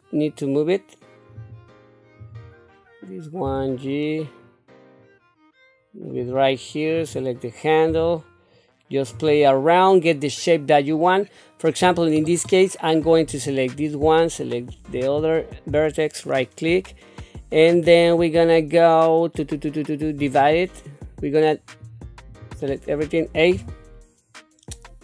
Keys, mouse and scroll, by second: 2.2 click, 3.4 g, 6.9 click, 7.9 g, 13.3 click, 14.9 shift+click, 16.2 right click, 20.4-21.8 right drag, 21.8 click, 23.5 a.